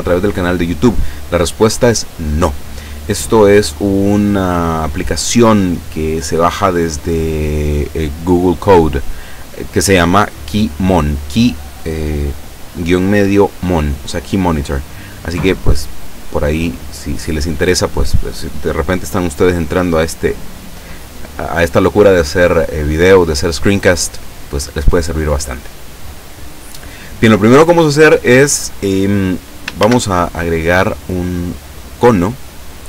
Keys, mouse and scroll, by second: 15.6-16.6 middle drag, 16.7 scroll up 1, 17.4 middle click, 29.8 shift+a, 32.3 click.